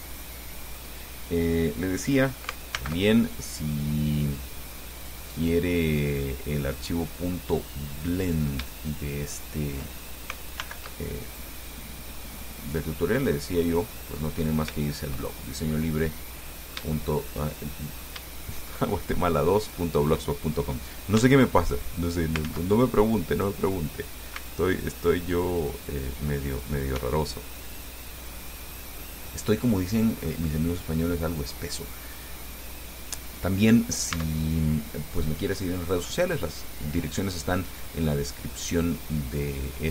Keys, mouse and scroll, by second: 0.1-1.2 shift+drag, 3.0 alt+m, 5.2 click, 5.9-7.1 drag, 8.5 right click, 9.6 shift+right click, 10.8 alt+m, 11.5 alt+click, 12.4-14.6 middle drag, 15.0-17.7 shift+middle drag, 17.8 shift+middle click, 17.8 shift+click, 18.6 shift+click, 19.9 right click, 21.4 x, 21.9 click, 22.7 ctrl+z, 23.5 right click, 24.6 x, 25.0 click, 26.7 right click, 27.2 x, 28.0 click, 28.5-30.4 middle drag, 30.4-30.7 scroll up 1, 30.7 scroll down 1, 31.2 middle click, 31.4-32.5 drag, 33.4-34.4 drag, 34.4 Tab.